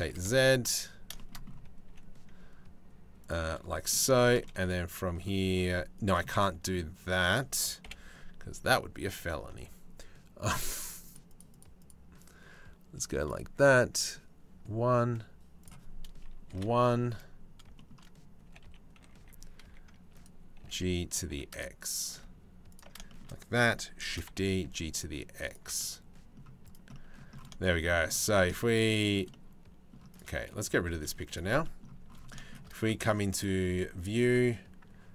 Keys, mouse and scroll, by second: 1.5 g, 3.1 middle click, 4.0 middle click, 5.2 g, 5.9 middle click, 6.2 click, 7.4 KP_7, 10.5 click, 10.7 click, 10.9 click, 11.1 click, 12.9 click, 15.2-16.2 drag, 17.4 shift+middle click, 18.1 g, 20.2 g, 22.7 shift+middle click, 23.7 shift+d, 25.4 middle click, 25.9 click, 26.3 click, 26.5 click, 28.8 click, 29.1 middle click, 29.8 click, 30.4 g, 33.0-35.1 drag.